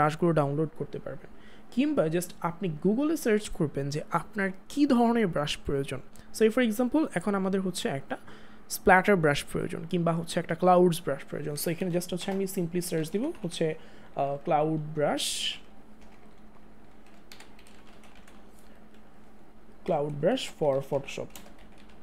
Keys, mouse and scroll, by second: 11.6 Return, 15.5 typing, 20.0-21.6 typing.